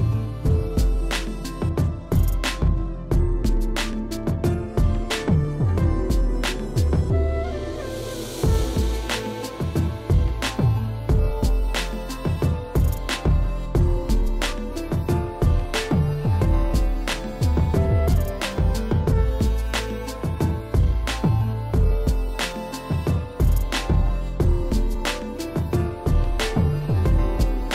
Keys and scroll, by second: 3.4 ], 9.4 space, 10.2 space, 10.4 l, 13.6 ctrl+alt+d, 14.5 ctrl+j, 14.7 v, 19.1 ctrl+e, 19.9 e, 20.3 ], 23.4 v, 23.7 ctrl+e, 27.4 ].